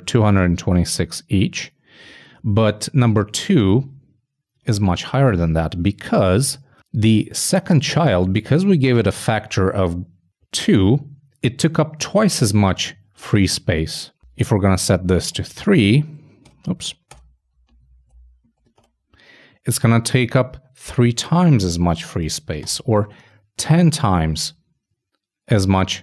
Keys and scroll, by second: 15.0 shift+Right, 15.3 shift+3, 17.9 super+Up, 18.0 super+Right, 18.2 super+Left, 18.8 shift+3.